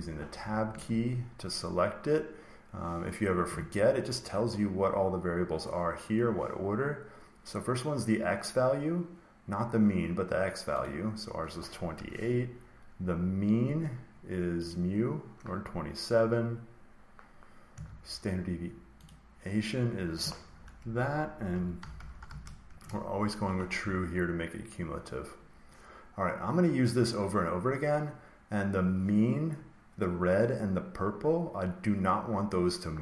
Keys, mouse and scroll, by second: 0.6 Tab, 10.7-12.7 drag, 14.6 click, 18.9 click, 21.2-23.1 typing.